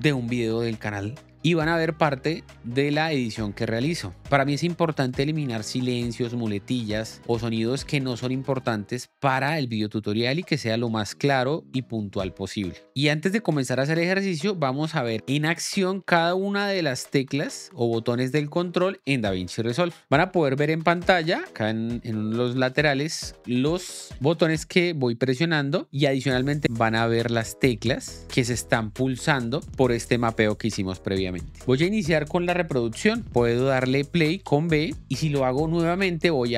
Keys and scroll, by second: 34.6 l.